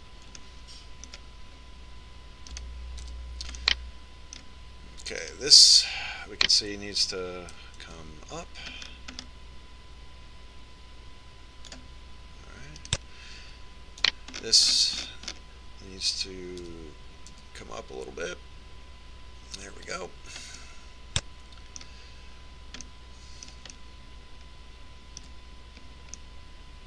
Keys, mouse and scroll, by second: 1.4-3.2 middle drag, 3.6 right click, 4.1 KP_Decimal, 4.7 KP_Enter, 4.9 middle click, 5.2 right click, 5.4 middle click, 6.3 right click, 8.2 g, 14.0 right click, 15.2 g, 21.8-23.5 middle drag, 24.0-26.6 middle drag.